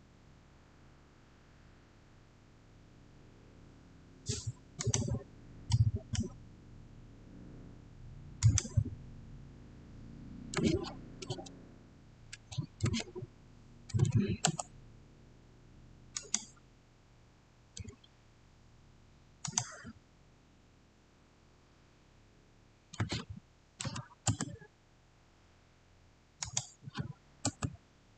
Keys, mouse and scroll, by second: 4.7 click, 4.7 click, 5.6-8.3 middle drag, 8.3 click, 10.5-11.2 typing, 12.2 Tab, 12.7-14.3 typing, 16.0 click, 19.3 click, 22.8-24.2 typing, 26.3 click, 27.3 Return.